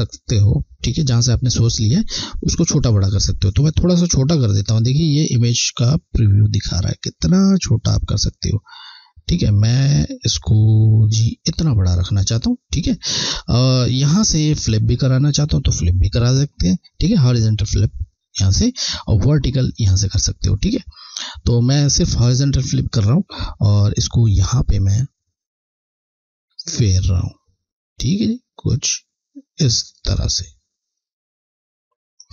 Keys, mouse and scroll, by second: 2.9 click, 17.7 click, 24.5 click.